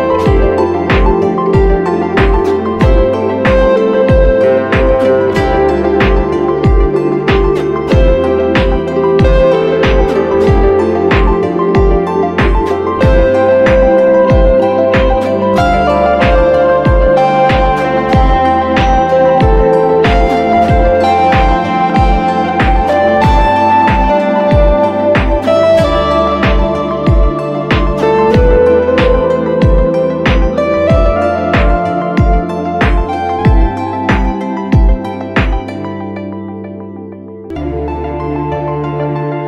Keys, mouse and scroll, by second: 19.7 alt+click, 27.8 right click, 28.7-30.3 typing, 29.9 right click, 31.6 [, 31.7 [, 33.6-34.0 scroll up 1.